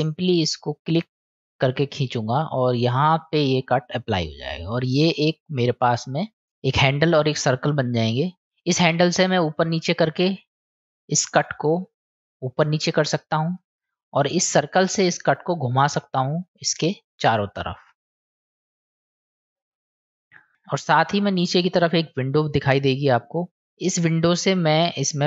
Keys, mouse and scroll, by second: 9.4-13.6 drag, 16.1-20.1 drag.